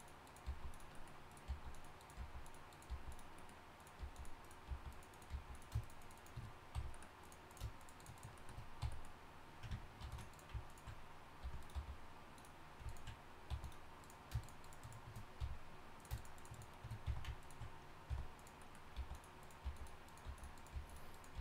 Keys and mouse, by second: 0.4 g, 1.5 g, 2.2 g, 2.9 g, 4.0 g, 4.7 g, 5.3 g, 6.1 shift+right click, 6.7 f, 8.8 f, 10.0 ctrl+r, 11.4 r, 11.7 g, 13.5 g, 15.4 f, 17.1 f, 18.1-21.4 typing.